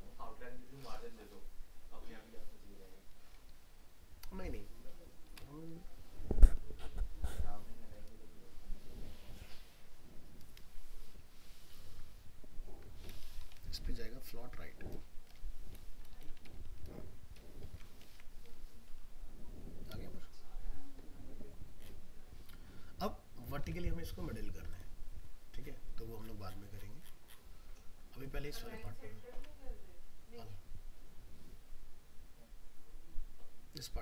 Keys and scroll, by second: 17.7 ctrl+s, 18.1 alt+Tab, 23.6 alt+Tab, 29.4 alt+Tab.